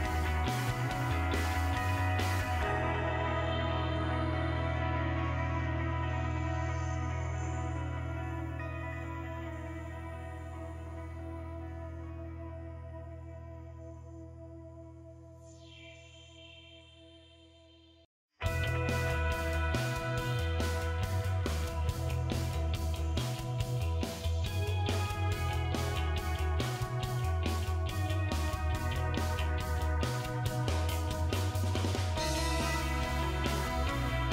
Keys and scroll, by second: 0.0-3.8 typing, 6.1 BackSpace, 6.3 BackSpace, 6.5 BackSpace, 7.6 3.